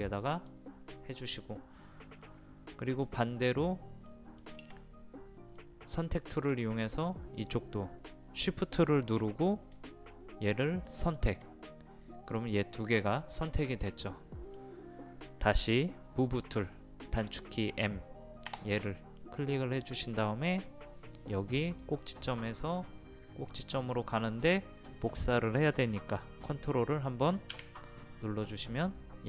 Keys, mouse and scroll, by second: 0.3 click, 2.2-3.9 middle drag, 11.0 shift+click, 13.7 middle click, 18.5 m, 21.6 click.